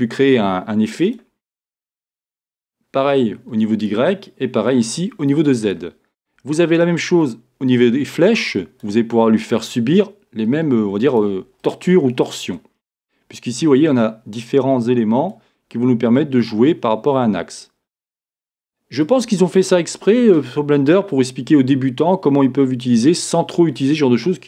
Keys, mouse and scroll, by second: 9.7-11.2 drag, 11.6-14.2 middle drag, 13.0-14.2 scroll up 2, 14.2-15.3 drag, 16.4-19.2 drag, 20.0-24.4 middle drag.